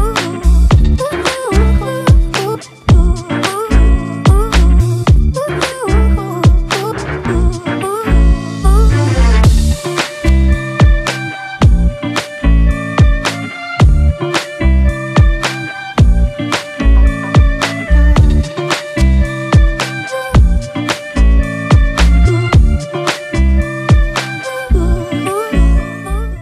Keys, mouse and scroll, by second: 1.9 double click, 4.0-4.5 alt+scroll up 1.